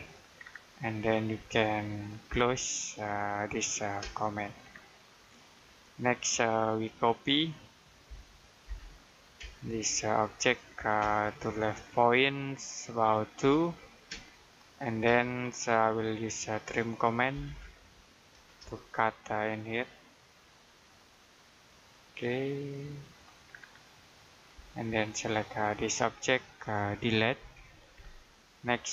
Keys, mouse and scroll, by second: 0.3-0.7 scroll down 1, 0.7 middle click, 2.1 c, 3.9 space, 4.4-4.8 scroll down 1, 5.0 middle click, 5.9-7.9 scroll up 1, 7.9 typing, 9.3 space, 9.7 click, 10.9 space, 11.1 click, 13.3-14.0 typing, 15.3-16.2 scroll up 1, 16.2 middle click, 17.2-18.2 typing, 20.7 click, 23.4-23.8 scroll down 1, 23.8 middle click, 25.1 click, 27.2 Delete, 27.9-28.2 scroll down 1, 28.2 middle click.